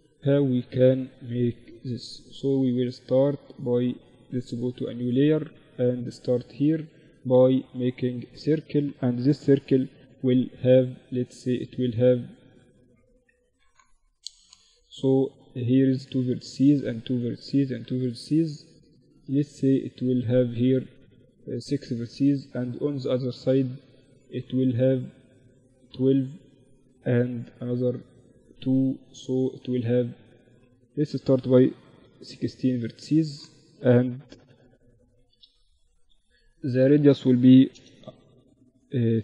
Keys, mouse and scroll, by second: 1.6-6.9 drag, 5.4 shift+a, 8.5 F6, 30.9 F6, 38.6 r.